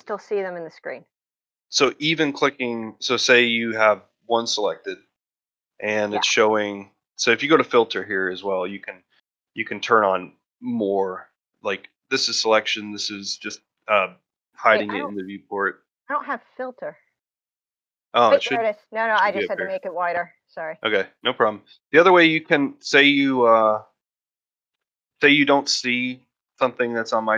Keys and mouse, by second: 7.2-18.5 drag, 22.2 middle click.